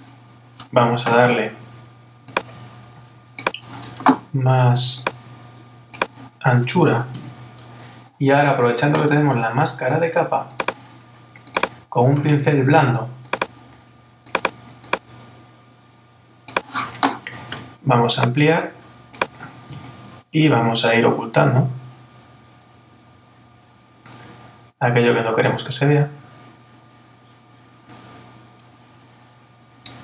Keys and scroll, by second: 7.1 Return.